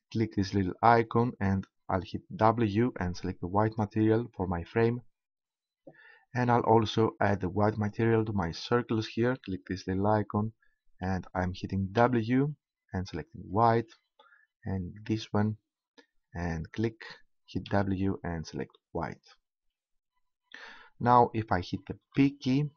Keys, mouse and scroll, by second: 0.8-2.7 drag, 7.7-9.7 right drag, 9.7-11.2 drag, 11.2 right click, 15.1-16.7 right drag, 16.7-18.6 drag, 22.1 p.